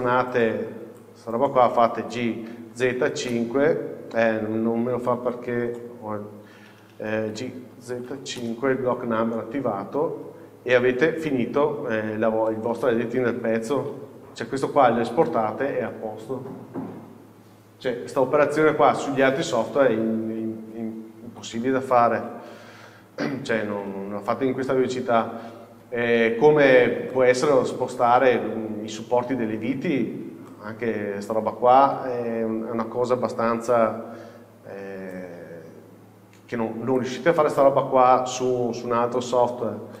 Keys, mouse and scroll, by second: 3.5 KP_Enter, 8.6 KP_Enter, 9.6-10.5 scroll up 1, 10.5-11.3 scroll down 1, 12.2 Tab, 12.6-15.7 middle drag, 13.8 z, 14.0 KP_6, 19.7 shift+middle click, 21.4 KP_7, 22.6 z, 22.8 KP_4, 23.5 scroll up 1, 24.1 scroll down 1, 25.3 scroll up 1, 27.2 shift+middle click, 30.0 scroll up 1, 30.6 shift+middle click, 31.9 z, 32.1 KP_4, 33.8 1, 35.2-38.5 drag, 39.7-40.0 scroll down 1.